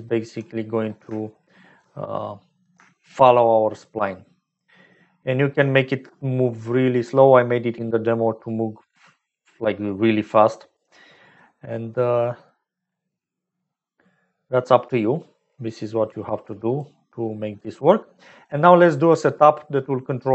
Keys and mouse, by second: 1.2 shift+middle click, 3.8-10.8 shift+drag, 11.5 middle click, 12.1 middle click, 14.2 middle click, 15.7 middle click, 16.8-17.9 drag, 18.1 middle click, 20.2 click.